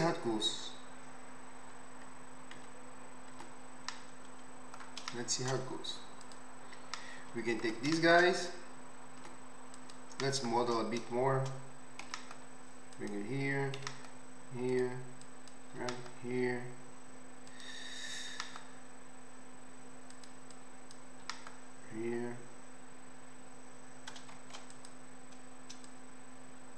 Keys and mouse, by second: 2.6 Tab, 2.7-6.2 right drag, 3.4 Tab, 6.2 middle click, 6.4 right click, 6.5-8.9 middle drag, 8.9 click, 9.2 Tab, 12.0 g, 13.1-15.2 drag, 13.8 e, 15.8 e, 17.6-20.5 drag, 18.3 e, 21.3 e, 24.8-25.8 drag.